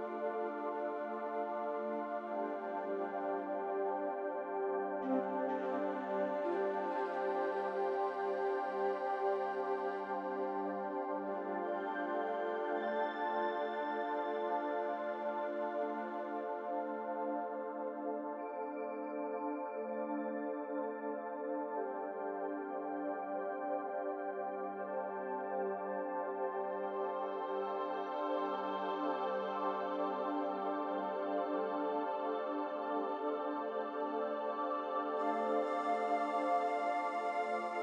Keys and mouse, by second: 1.2 shift+click, 10.7 shift+click, 11.2 shift+click, 15.3 3, 15.7 click, 17.6 click, 18.0-22.1 drag, 25.6 click, 26.0 click, 27.9 Tab, 32.6 1, 34.8 click, 36.0 click, 36.9 1, 37.4 click.